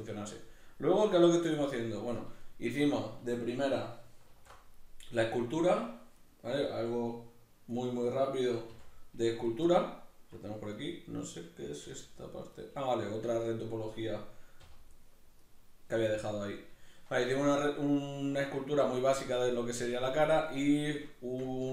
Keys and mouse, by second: 2.4-5.0 shift+middle drag, 4.3 alt+h, 5.0 right click, 6.2 right click, 7.8 right click, 8.7 h, 9.4 right click, 9.7-10.7 middle drag, 10.7 right click, 11.9 g, 12.7 right click, 12.9-15.4 middle drag, 14.6 h, 15.4 right click, 16.1-20.4 middle drag, 20.4 right drag, 20.7-21.7 shift+middle drag.